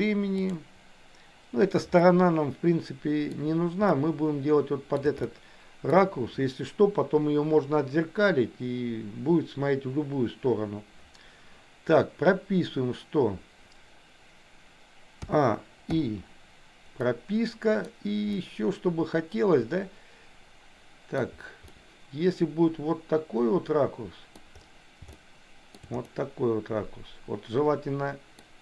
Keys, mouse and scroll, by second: 2.1-3.4 middle drag, 3.9-5.0 middle drag, 5.7 shift+middle click, 15.2 a, 16.0 i, 17.0-18.1 middle drag, 21.7-24.4 middle drag, 25.2 shift+middle click, 26.0-28.4 middle drag.